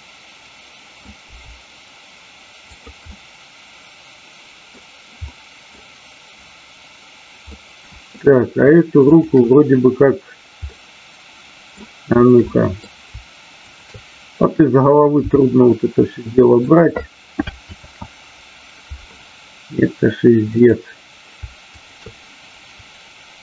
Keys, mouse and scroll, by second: 3.1 scroll up 1, 3.3-4.6 middle drag, 5.2 middle click, 7.5-8.0 middle drag, 9.0-9.9 shift+drag, 10.8 middle click, 12.4-12.8 middle drag, 13.7 shift+click, 16.6 click, 17.7 ctrl+z, 20.5 click, 21.6 shift+click.